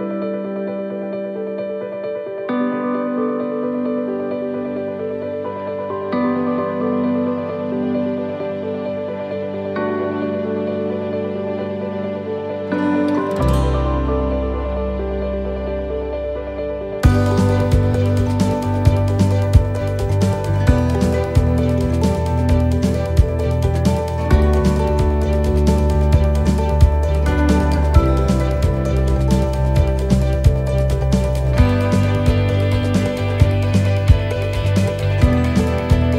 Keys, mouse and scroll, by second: 1.6 middle click, 3.3 s, 3.6 middle click, 4.2 scroll down 1, 4.9 click, 7.9 e, 9.0 middle click, 9.0 scroll up 1, 10.4 scroll up 1, 10.4 l, 10.8 middle click, 11.5 shift+middle click, 11.5 scroll down 2, 17.6 click, 17.6 scroll down 2, 19.4 middle click, 21.3 shift+d, 25.7 middle click, 25.8 s, 33.0 middle click, 33.3-33.8 scroll down 2, 33.7 shift+middle click, 34.0 scroll up 4, 34.5 shift+middle click, 35.0 middle click, 35.7 shift+middle click.